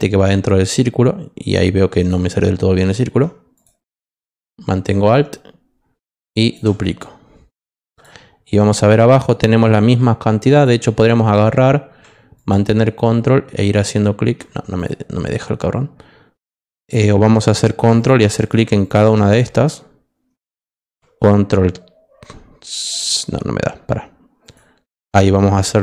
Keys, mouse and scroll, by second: 3.5 click, 5.1-6.5 alt+drag, 7.9 click, 12.3 ctrl+click, 13.6 ctrl+click, 14.7 click, 16.8 click, 17.9 ctrl+click, 18.3 ctrl+click, 18.8 ctrl+click, 24.4 click, 25.0 click.